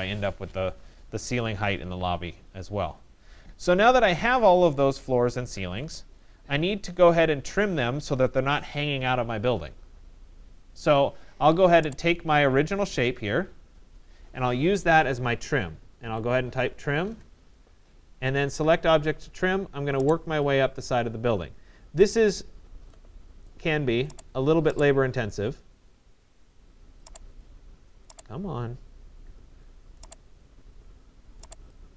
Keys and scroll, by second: 16.6 Return.